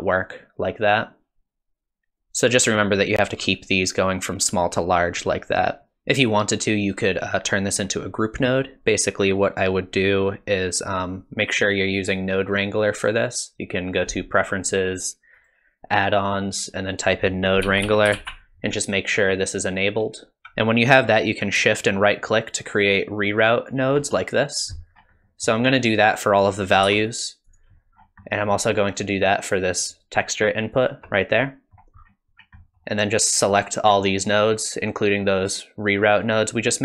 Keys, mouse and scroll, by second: 2.2 ctrl+z, 12.9 click, 20.4 alt+right click, 21.8 shift+right click, 24.9 scroll down 3, 25.2 middle click, 25.9 click, 26.9 g, 28.0-28.3 scroll up 3, 28.3 middle click, 30.0 shift+right click, 31.4 middle click, 32.0-32.6 scroll down 7, 32.6 middle click, 33.5 click.